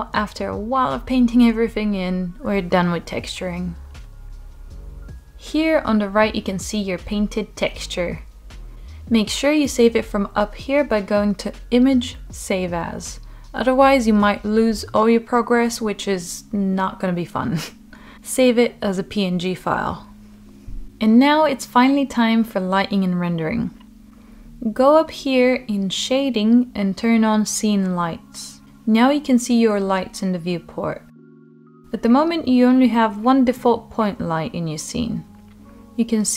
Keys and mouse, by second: 2.3 click, 9.1-21.7 drag, 21.9-23.2 middle drag, 25.0-34.8 drag, 35.6 click.